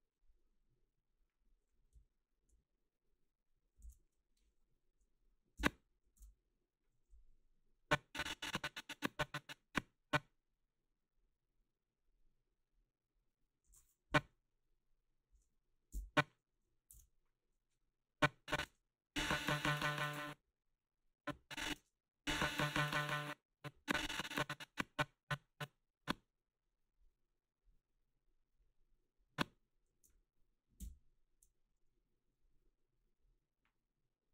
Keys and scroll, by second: 5.6 Right, 6.2 ctrl+v, 14.1 Left, 15.9 Right, 16.9 ctrl+v, 18.7 space, 20.0 space, 21.8 space, 23.0 space.